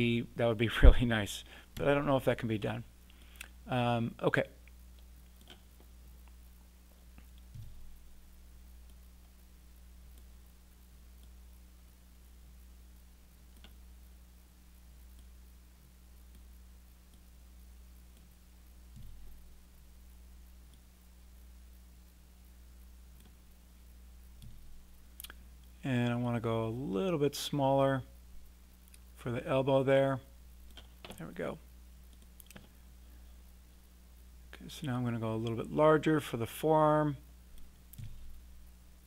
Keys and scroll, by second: 1.7 r, 7.5 w, 18.9 e, 24.4 r, 38.0 w.